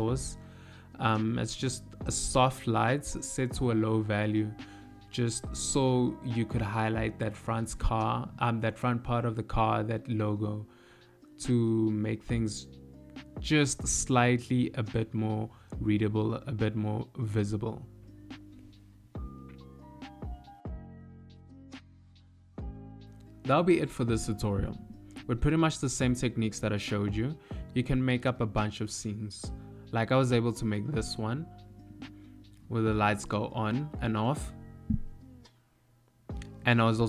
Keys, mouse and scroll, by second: 1.5 click, 4.1 middle click, 9.7 click, 11.9 click, 12.7 click.